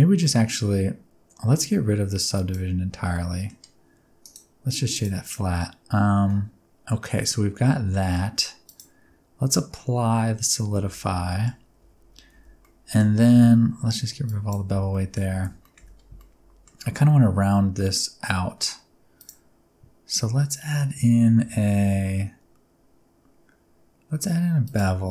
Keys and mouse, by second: 2.3 click, 3.2 middle click, 4.3-5.0 drag, 5.3-7.9 middle drag, 8.6 click, 10.8 ctrl+a, 11.3 middle click, 11.8 Tab, 12.3 alt+z, 12.6 middle click, 13.3 a, 14.3 click, 14.8 alt+z, 14.9 middle click, 15.3 alt+z, 15.6 middle click, 15.8 Tab, 16.2-16.6 middle drag, 19.3-24.7 drag.